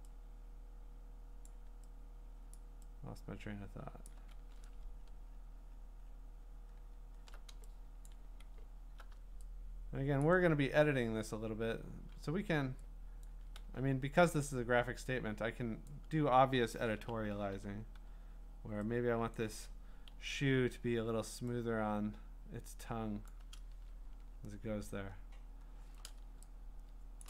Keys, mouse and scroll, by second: 1.4 click, 2.6 click, 4.0 click, 4.4-6.1 scroll, 6.3 scroll down 10, 7.7 scroll, 8.0 click, 10.2 click, 13.2 click, 13.6 x, 15.9 click, 17.0 ], 17.5 ], 17.9 [, 19.3 click, 20.1 x, 23.3 click, 23.9-24.4 scroll, 24.6-25.0 scroll down 17, 25.3-25.9 scroll up 11, 25.9 scroll.